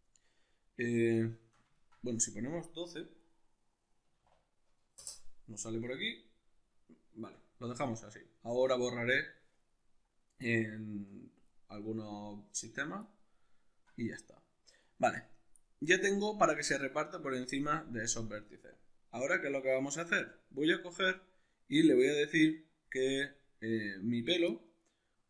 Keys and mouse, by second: 2.6-6.2 drag, 5.0 Return, 6.2-25.2 middle drag.